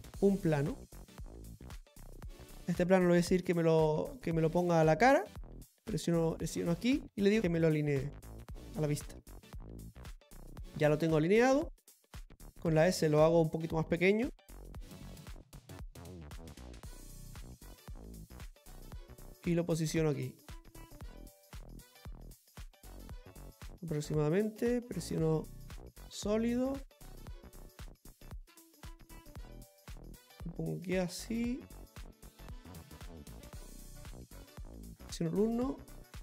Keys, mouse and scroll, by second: 6.4 z, 6.8 click.